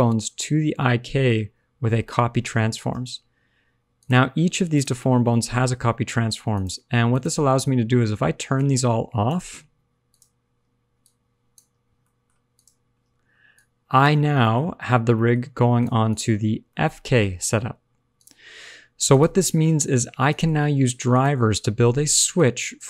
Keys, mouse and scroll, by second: 3.9 click, 4.7 click, 6.5 click, 7.0 click, 8.5 click, 10.0 click, 10.9 click, 11.9 middle click, 12.5 click, 13.5 click, 14.5 shift+middle click, 15.1 middle click, 15.4-15.7 scroll up 1, 15.7 click, 16.0 click, 16.6 middle click, 16.6-17.1 scroll down 1, 17.1 r, 18.4 alt+r, 18.5 alt+g, 19.0 click, 19.5 r, 20.4 alt+r, 20.5 alt+g, 21.1 click, 22.3 click.